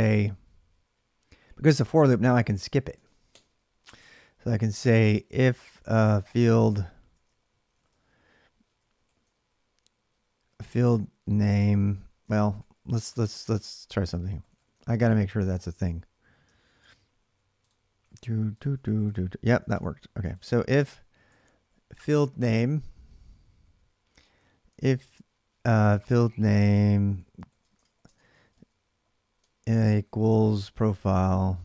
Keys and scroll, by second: 1.8-9.0 typing, 11.8-15.4 typing, 16.6 ctrl+r, 17.6-19.5 typing, 19.5 alt+Tab, 21.1 ctrl+[, 21.2-29.1 typing, 30.5-31.6 typing.